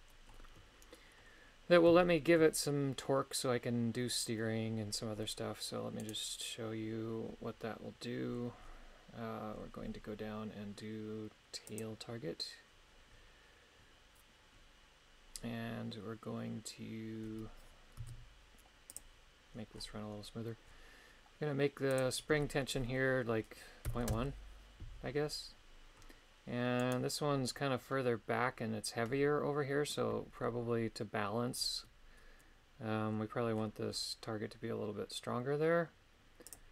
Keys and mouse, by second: 2.0 shift+middle click, 11.7 click, 18.0 z, 21.9-24.1 drag, 26.8 right click, 36.6 click.